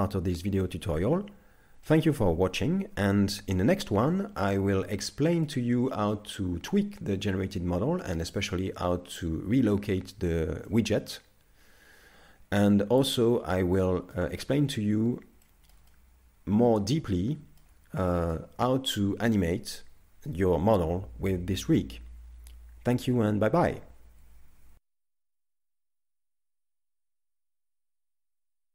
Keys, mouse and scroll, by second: 1.9 middle click, 4.4 middle click, 7.7 middle click, 10.7 middle click, 15.5 shift+middle click, 15.9 middle click, 18.1 shift+middle click, 18.9 middle click.